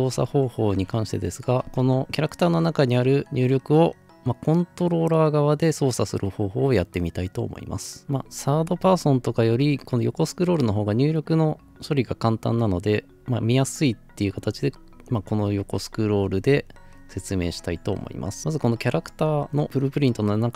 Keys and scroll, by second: 0.7-2.5 typing, 1.6 Escape.